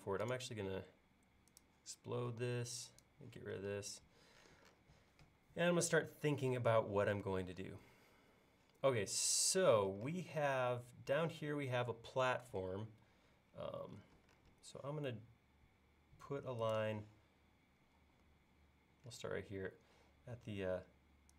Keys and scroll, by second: 2.3 e, 3.8 space, 12.9 l, 18.0 typing.